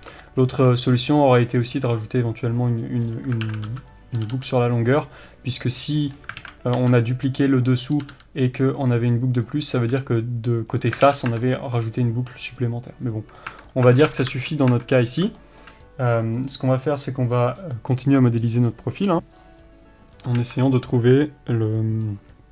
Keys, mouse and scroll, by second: 0.0-0.3 scroll up 2, 0.3-3.1 shift+middle drag, 3.1-3.5 scroll up 2, 3.5 alt+a, 4.0 b, 5.9 click, 6.2 scroll down 1, 6.5 alt+a, 7.7 b, 9.5 click, 9.8 r, 10.9 click, 11.1 alt+a, 11.2 scroll down 1, 11.4 Tab, 11.5-20.5 middle drag, 13.6 Tab, 14.4 KP_3, 14.8 Tab, 15.1-15.4 scroll up 1, 20.5 click, 20.7 Tab.